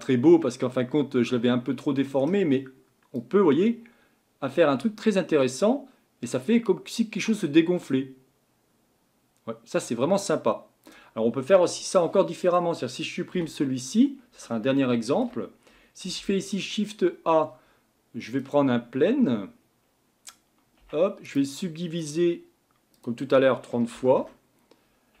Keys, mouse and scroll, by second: 3.1-11.3 drag, 11.3-12.0 scroll down 3, 12.0-13.3 middle drag, 13.3 Delete, 14.8-16.0 shift+middle drag, 16.0 shift+a, 19.8-20.8 scroll up 2, 20.8 Tab, 21.2-22.9 right drag, 22.9-25.2 drag.